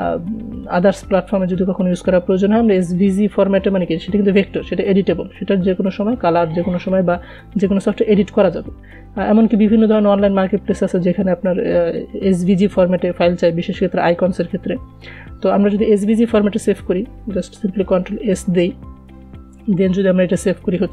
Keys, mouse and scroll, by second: 16.4 ctrl+Num_Lock, 18.4 ctrl+s.